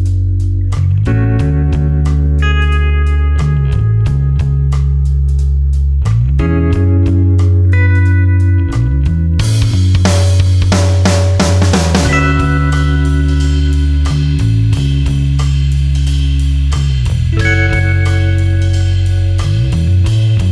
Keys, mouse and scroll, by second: 1.9 space, 2.0 ctrl+click, 2.5 space, 11.4 space, 11.9 ctrl+alt+click, 13.4 ctrl+click, 14.3 alt+click, 18.1 ctrl+space, 18.2 ctrl+click, 18.8 space, 19.3 click, 19.5 space, 20.4 click.